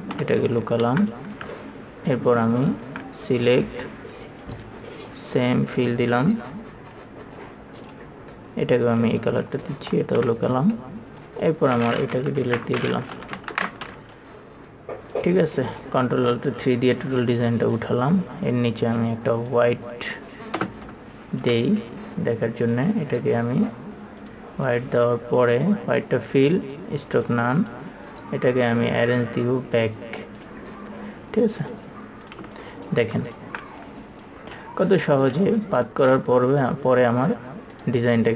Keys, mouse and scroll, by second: 0.5 KP_3, 1.2 space, 1.4 click, 2.7 ctrl+click, 4.8 click, 11.6-12.6 drag, 11.6 KP_3, 12.7 Delete, 13.8 KP_3, 15.5-21.7 drag, 21.7 space, 23.1 click, 23.3 right click, 24.5 click, 28.4 right click, 30.7 click, 33.6-37.3 ctrl+drag.